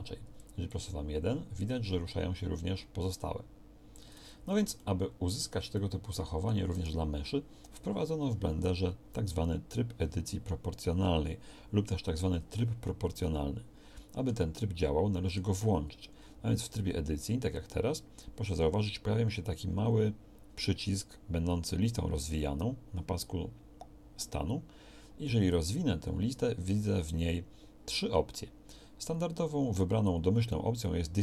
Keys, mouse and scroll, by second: 4.1 Tab, 16.6 Tab.